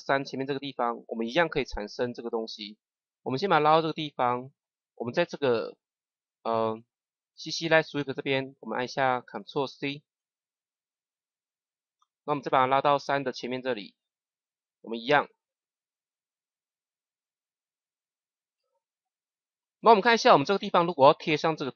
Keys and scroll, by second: 9.9 ctrl+c.